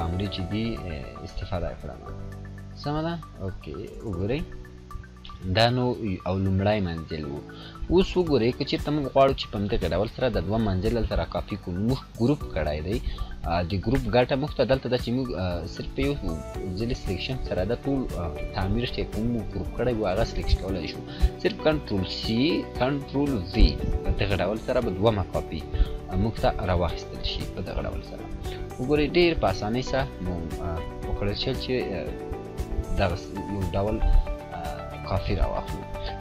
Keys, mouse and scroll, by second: 1.8-4.9 drag, 5.3-8.5 drag, 15.1 click, 15.1-15.8 scroll down 2, 15.8-17.6 scroll down 1, 17.6 scroll down 1, 21.7-22.3 scroll down 1, 26.1 click, 28.4-30.5 drag.